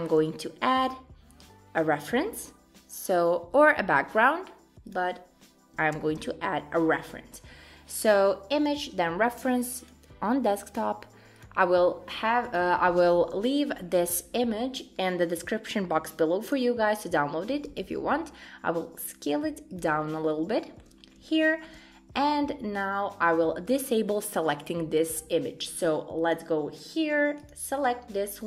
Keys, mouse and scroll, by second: 4.9 click, 5.9 shift+a, 12.5 click, 13.7-15.4 scroll down 1, 15.4 scroll down 1, 17.8 s, 20.1-20.5 scroll up 3, 20.5 shift+middle click, 21.0 scroll up 2, 21.3 shift+middle click, 23.1 click.